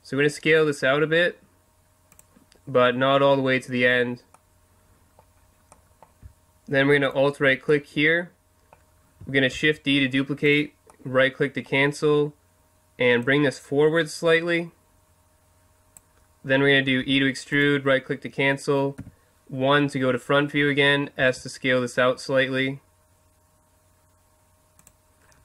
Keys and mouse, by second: 2.2-4.0 drag, 4.0-7.1 middle drag, 9.6 shift+d, 11.5-12.7 drag, 13.2 click, 17.0 e, 17.6-20.2 drag, 19.0 KP_1, 21.2 s, 24.9-25.4 drag.